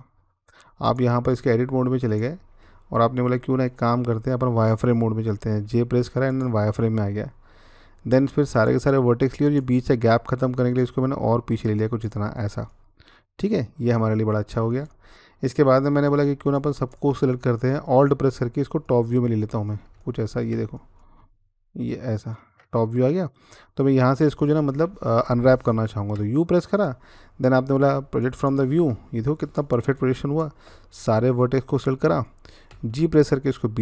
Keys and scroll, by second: 5.2 z, 26.0 u, 32.5 g.